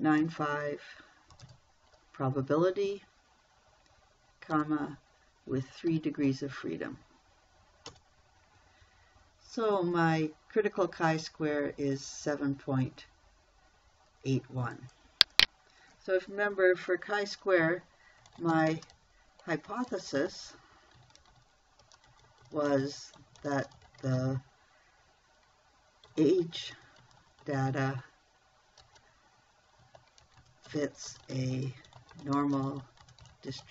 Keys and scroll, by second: 0.1 0, 0.6 ., 1.8 9, 1.9 5, 5.0 ,, 6.3 3, 8.3 Return, 18.7-24.5 typing, 26.5-27.9 typing, 29.2 space, 30.3-33.7 typing.